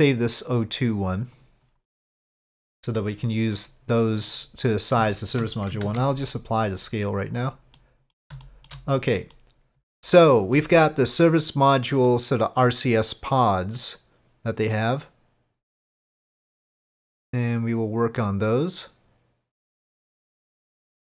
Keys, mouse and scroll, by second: 0.5-1.4 drag, 1.9-2.3 middle drag, 4.2 click, 5.1-5.4 shift+middle drag, 5.8 ctrl+a, 7.8-8.2 middle drag, 8.4 shift+middle drag, 9.3-10.2 middle drag.